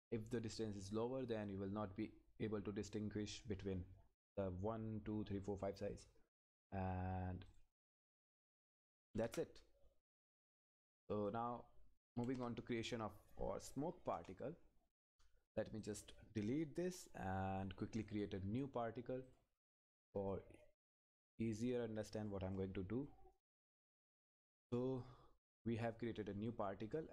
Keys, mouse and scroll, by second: 0.4 scroll down 1, 3.8-5.6 scroll up 1, 7.4 scroll down 1, 7.5 click, 10.8 click, 13.0 click, 14.1 Return, 15.8 click, 19.3 click, 20.8 scroll up 1, 21.3 click, 21.8 scroll down 1, 22.3 click, 22.7-23.1 scroll up 1, 23.1 click, 24.0-25.8 scroll down 1.